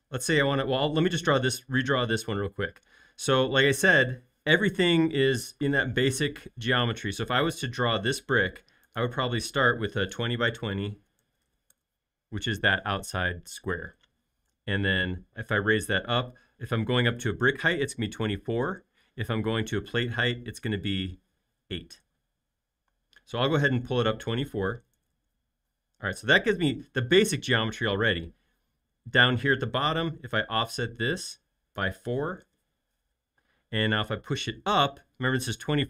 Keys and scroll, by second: 6.9 r, 10.3-11.9 typing, 14.3 p, 24.8-26.2 typing, 30.3 f, 32.3 typing, 32.4 Return, 33.4 space, 34.0 p.